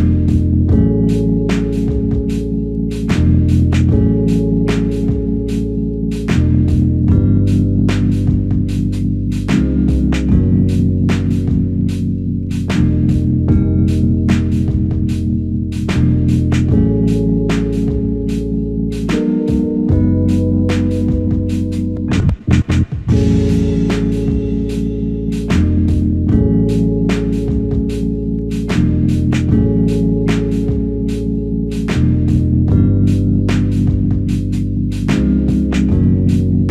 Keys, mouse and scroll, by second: 2.2 typing, 3.3 typing, 6.8 typing, 7.8 typing.